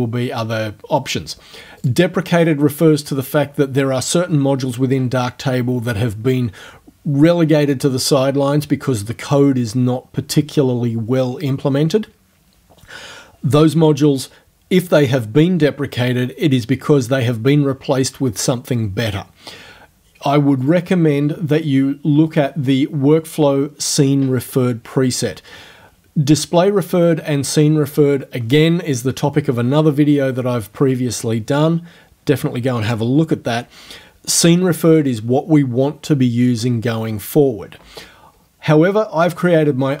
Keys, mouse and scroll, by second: 1.9 click, 20.6 click.